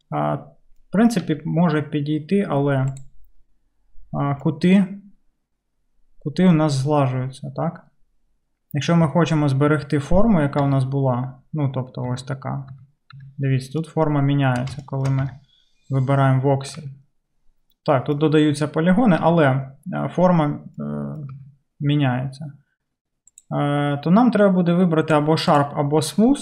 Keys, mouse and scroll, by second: 1.2 q, 10.7 Tab, 12.2 Tab, 12.7 Tab, 13.2 Tab, 14.4-16.2 middle drag, 15.3 Tab, 18.0 Tab, 19.3 Tab, 21.3 Tab, 23.3-24.4 drag, 25.1 click.